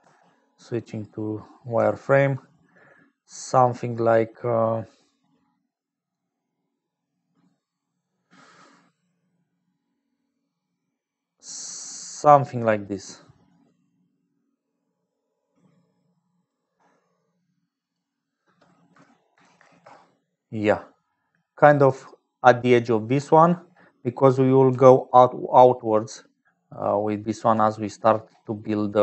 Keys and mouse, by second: 0.0-27.7 typing, 2.1-20.8 shift+drag, 25.4-26.5 drag, 26.9 click, 28.9 click.